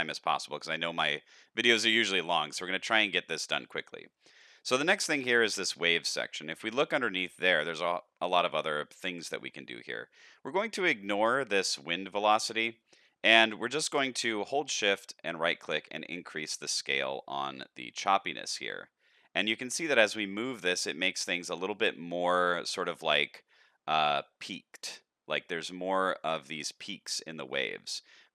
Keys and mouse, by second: 0.1 shift+middle click, 2.2 click, 3.3 click, 14.3-21.2 shift+drag, 21.5-22.3 middle drag, 23.0-23.5 shift+middle drag, 23.7-24.7 middle drag, 27.0-28.3 shift+drag.